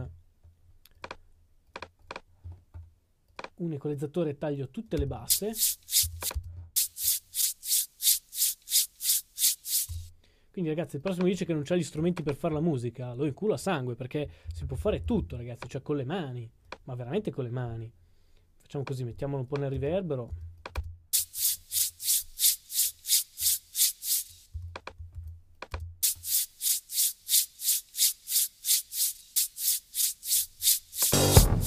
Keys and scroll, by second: 0.0-1.9 typing, 25.1 super+d.